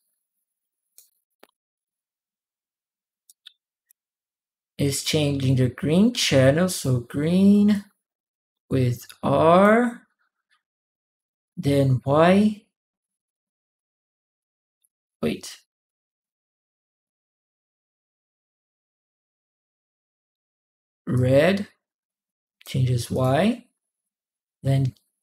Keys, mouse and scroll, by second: 3.0 right click, 6.5 click, 7.5-9.4 drag, 20.9-22.4 drag, 22.9 click.